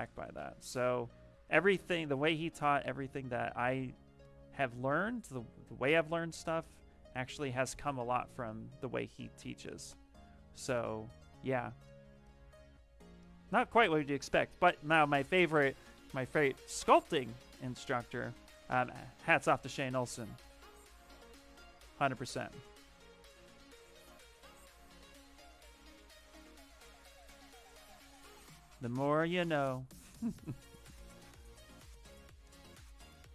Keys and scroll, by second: 7.1 ctrl+shift+space, 9.4 ctrl+shift+space, 21.6 s.